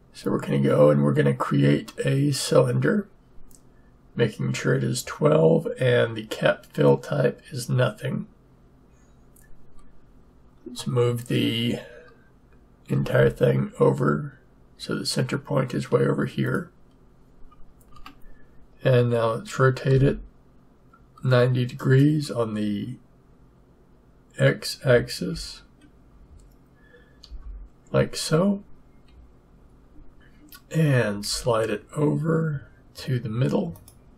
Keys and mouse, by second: 2.3-4.1 drag, 12.9 g, 17.9 Tab, 19.9 r, 31.1 g.